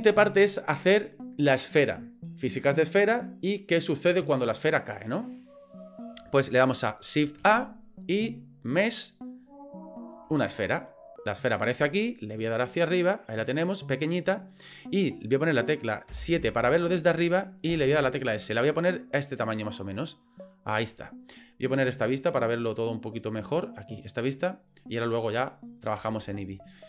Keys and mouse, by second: 5.5 middle click, 7.4 shift+a, 12.4-14.6 drag, 16.1 KP_7, 17.7 s, 22.2 click, 23.5 click, 26.7-26.8 middle drag.